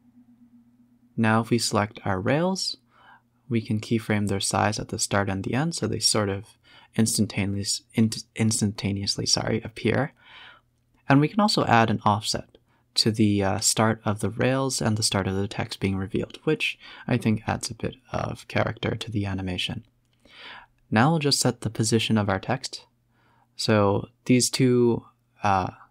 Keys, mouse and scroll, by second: 0.5 click, 1.1 shift+click, 1.4 shift+click, 2.2 s, 4.0-6.1 typing, 7.5 click, 7.9 click, 8.7 click, 8.9 click, 9.2 g, 11.1-11.7 drag, 11.7 space, 12.1-13.6 scroll down 2, 12.3 a, 14.9 space, 15.8 click, 16.5 scroll up 5, 16.8 scroll down 2, 17.3 click, 17.7 click, 18.5 shift+click, 18.8 g, 21.9 click, 22.5 shift+click, 22.8 g, 24.8 shift+click, 25.3 shift+click.